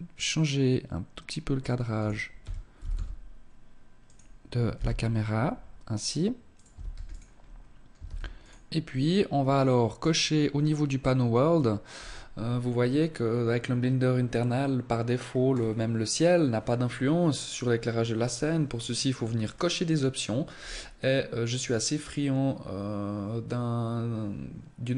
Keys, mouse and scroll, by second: 1.4 r, 3.8 g, 5.8 ctrl+s, 6.4 scroll up 2, 7.0 ctrl+s, 9.0 click, 10.2-10.6 scroll down 3, 14.3 scroll down 1, 14.5 scroll up 3, 16.6 scroll down 3, 18.4-18.9 scroll down 3, 19.6-20.6 scroll up 2, 20.6 click, 20.6 scroll up 2.